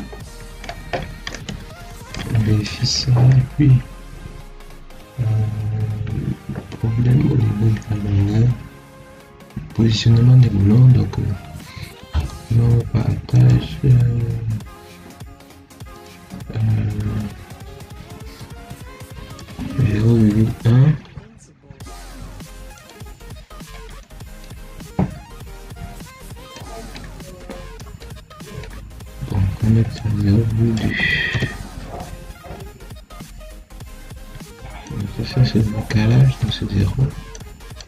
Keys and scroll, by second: 20.2 1, 31.2 2, 36.3 0.